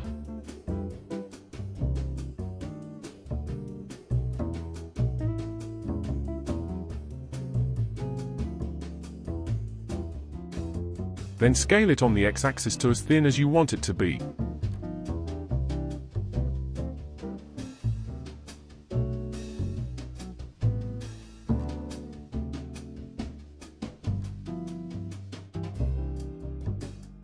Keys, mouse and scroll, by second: 0.0-0.3 middle drag, 0.3-1.0 scroll up 6, 1.0 KP_1, 1.5 g, 3.0-3.7 middle drag, 3.7-4.0 scroll up 5, 4.0-5.1 middle drag, 5.1 scroll down 4, 5.3-8.3 middle drag, 8.6-9.4 scroll down 4, 9.4-10.8 shift+middle drag, 10.8 s, 10.9 ctrl+z, 11.9 s, 16.7-17.1 scroll down 2, 17.1-19.1 middle drag, 19.1 ctrl+s, 20.2-23.2 middle drag, 26.0-27.0 scroll down 5.